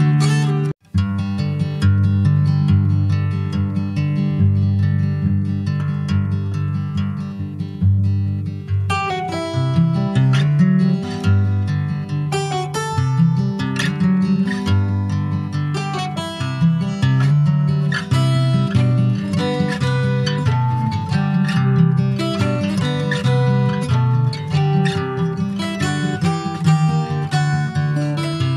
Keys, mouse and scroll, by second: 2.8 click, 5.6 click, 5.8 scroll down 4, 6.1 middle click, 6.7 click, 6.8-7.3 scroll down 8, 7.3 shift+middle click, 7.9-8.6 scroll up 3, 8.3 ctrl+s, 8.8 shift+middle click, 9.0 shift+scroll up 1, 9.1 middle click, 9.6 click, 10.0 scroll up 2, 10.3 middle click, 10.6 click, 11.0 Tab, 11.4 click, 11.9 middle click, 12.8 click, 13.4 click, 13.7-14.0 scroll up 2, 14.1 middle click, 14.6 Tab, 15.1 click, 16.1 /, 16.6 middle click, 17.1 Tab, 17.3 middle click, 17.7-18.0 scroll up 1, 18.0 middle click, 18.5 2, 18.9 click, 19.7 alt+shift+click, 20.8 alt+shift+click, 21.4 middle click, 21.9 ctrl+b, 25.2 middle click, 26.2 ctrl+r, 27.3 middle click, 28.0 ctrl+click, 28.2 ctrl+b.